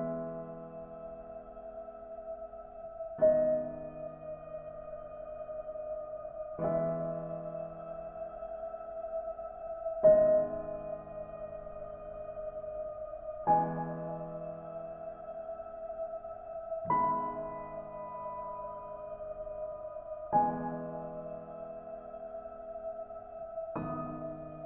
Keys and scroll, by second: 19.4 ctrl+z.